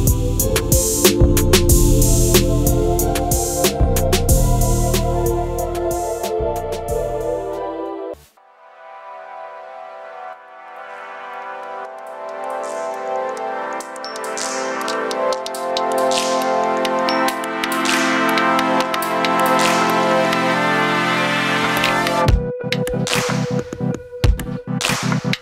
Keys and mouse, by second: 0.6 KP_Decimal, 1.6-2.1 middle drag, 3.0 middle drag, 4.0 shift+a, 11.7 shift+a, 18.0-19.1 drag, 20.3-20.7 middle drag, 21.5-22.7 drag, 23.8-25.0 drag.